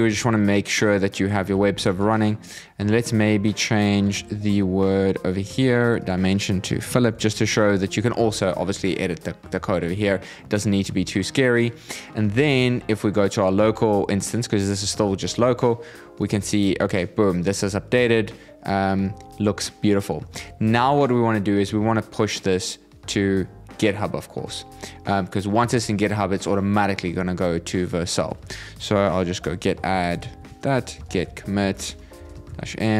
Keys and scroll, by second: 6.6 shift+p, 7.8 super+s, 27.9 ctrl+c, 32.2 shift+'.